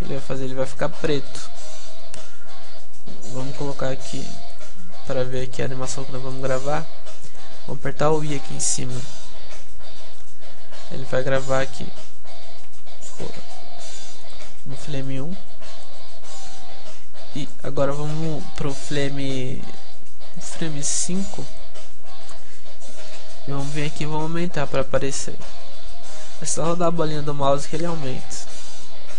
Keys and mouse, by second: 1.5-5.4 drag, 5.4-8.7 middle drag, 8.7-10.0 drag, 13.1 g, 14.9-20.3 drag, 20.7-24.9 drag.